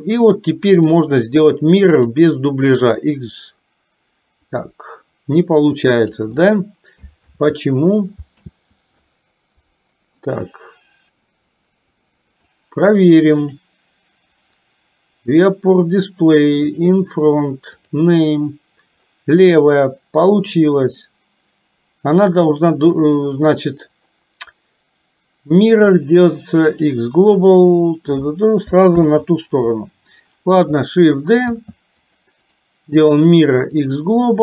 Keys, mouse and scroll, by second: 4.6-6.2 drag, 7.2 ctrl+z, 8.5 ctrl+z, 12.4 click, 13.5 click, 15.2 click, 17.9 click, 29.0 ctrl+z, 31.6 shift+d.